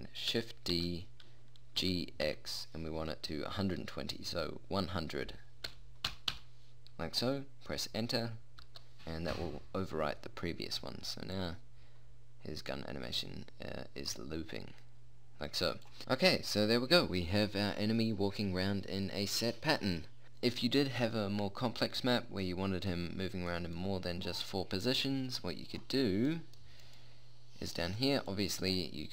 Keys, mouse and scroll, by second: 1.3 shift+d, 11.9-13.7 drag, 16.5 p, 28.9 click.